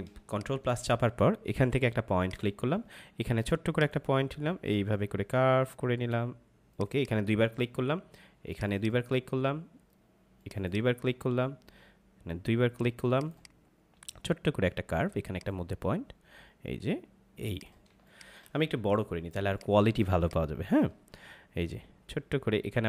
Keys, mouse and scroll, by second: 0.1 space, 0.3 click, 0.5 space, 2.1 click, 6.7 click, 17.8 space, 18.0 click, 18.3 space, 18.8 ctrl+=, 19.4 space, 19.5 click, 19.9 space.